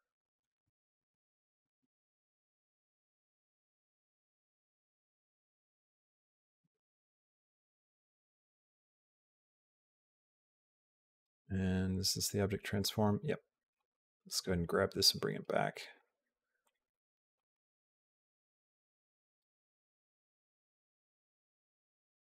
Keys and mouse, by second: 0.2 click, 0.8 Tab, 1.6 click, 2.0 click, 2.5 Tab, 4.4 click, 5.1 click, 6.2 Tab, 6.5 click, 7.3 click, 7.6 Tab, 8.2 Tab, 9.2-11.1 drag, 12.5 click, 16.5 click, 17.2 click, 17.9-19.2 drag, 19.6 click, 20.1 click, 21.6 click, 21.9 space.